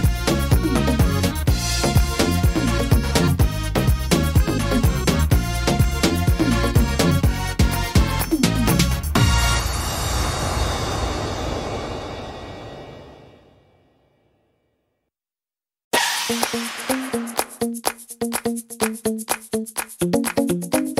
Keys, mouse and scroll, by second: 0.2 scroll up 2, 0.7 shift+middle click, 1.1-1.6 scroll up 4, 1.6 shift+middle click, 2.3 right click, 2.7 l, 3.8 s, 5.5 click, 6.8 middle click, 7.3 scroll down 2, 7.7 middle click, 8.0-8.7 scroll down 4, 8.7 middle click, 10.5 shift+middle click, 11.0-11.4 scroll up 4, 11.5 shift+middle click, 11.9 scroll up 1, 12.3 shift+middle click, 13.1 right click, 14.2 l, 15.2 shift+d, 16.5 click.